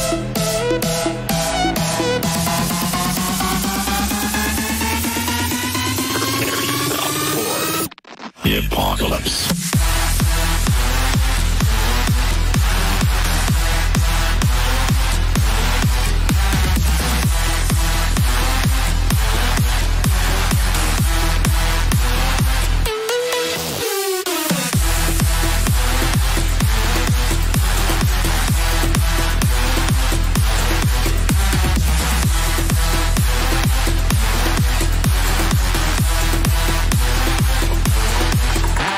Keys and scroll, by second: 13.5 g, 29.5-32.6 typing.